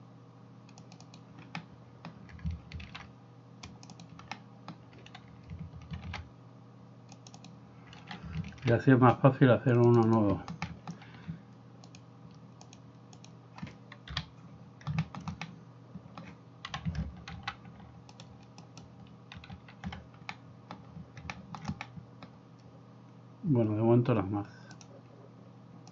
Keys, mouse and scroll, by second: 2.9 ctrl+r, 8.6 ctrl+r, 11.9-25.0 drag, 14.2 KP_7, 16.8 KP_7, 17.5 alt+g, 18.8 alt+right click, 19.6 alt+g.